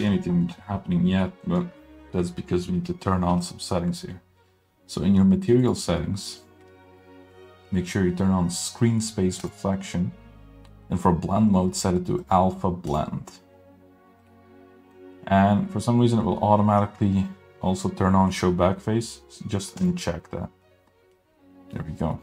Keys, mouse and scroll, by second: 0.1 middle click, 1.2 middle click, 5.6 click, 9.6 click, 12.2-13.3 drag, 14.3 scroll down 1, 14.4 middle click, 15.1 scroll up 1, 20.0 drag, 20.7-21.8 middle drag, 22.0-22.2 scroll down 2, 22.1 middle click.